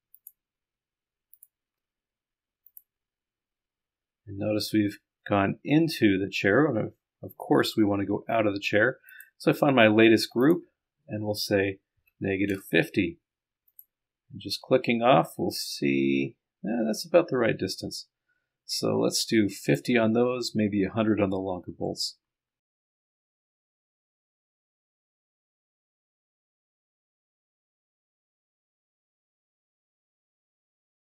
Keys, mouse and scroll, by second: 2.9 click, 10.4 click, 13.7 click, 14.6 scroll up 1, 15.4 middle click, 16.0-19.9 drag, 21.2-22.4 scroll up 1, 22.4 scroll up 1, 22.6 middle click, 22.7 scroll down 3, 22.9 ctrl+click, 23.2 click, 23.4 click, 23.8 click, 23.9 middle click, 28.0 click, 28.5 click, 28.7 click, 30.2 scroll down 2, 30.4-30.8 scroll up 3.